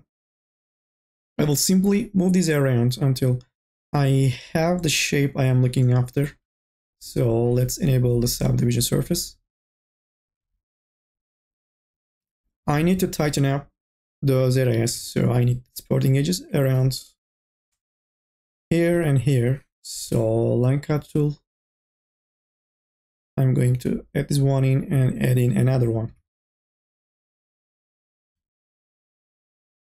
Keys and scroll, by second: 0.1 o, 10.0 n, 10.3 a, 13.8 q, 17.4 k, 26.0 e, 26.9 1, 28.2 m, 28.7 o.